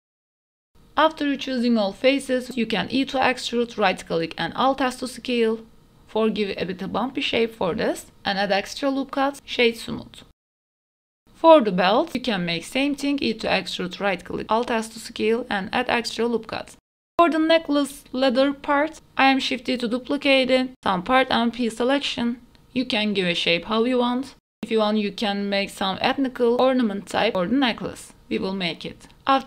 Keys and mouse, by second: 0.2 shift+click, 0.8 middle click, 0.9 shift+click, 1.1 shift+click, 1.2 middle click, 1.4 shift+click, 1.6 shift+middle click, 1.8 shift+click, 1.8 ctrl+z, 1.8 middle click, 2.2 e, 2.6 alt+s, 3.9 middle click, 4.3 middle click, 4.8 Tab, 4.9 middle click, 5.4 Tab, 6.1 alt+click, 6.6 2, 7.1 ctrl+r, 7.1 middle click, 7.4 ctrl+r, 8.3 middle click, 8.4 Tab, 8.6 right click, 9.2 middle click, 9.6 right click, 9.8 middle click, 10.3 middle click, 10.5 middle click, 10.9 middle click, 11.1 Tab, 11.4 shift+middle click, 11.6 middle click, 12.0 ctrl+r, 12.8 click, 13.0 ctrl+r, 13.8 3, 14.1 alt+click, 14.3 middle click, 14.6 e, 14.9 alt+s, 15.9 ctrl+r, 16.8 ctrl+r, 17.2 Tab, 17.2 middle click, 17.4 KP_1, 17.6 shift+middle click, 18.1 shift+middle click, 18.3 Tab, 18.4 middle click, 18.8 3, 19.0 middle click, 19.1 middle click, 19.4 shift+middle click, 19.6 middle click, 20.0 middle click, 20.2 KP_1, 21.4 shift+d, 22.6 p, 23.5 Tab, 23.8 right click, 24.5 g, 24.7 right click, 24.8 Tab, 24.8 middle click, 25.5 middle click, 25.9-27.2 typing, 27.0 click, 27.0 middle click, 28.1 ctrl+r, 29.1 Tab, 29.2 shift+middle click, 29.2-29.4 typing.